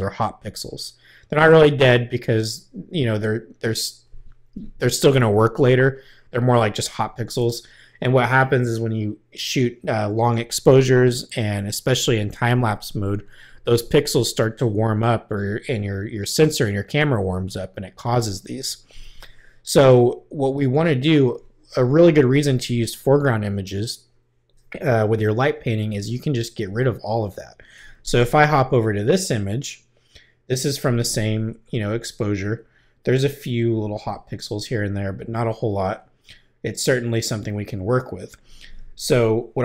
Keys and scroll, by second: 28.5 Left.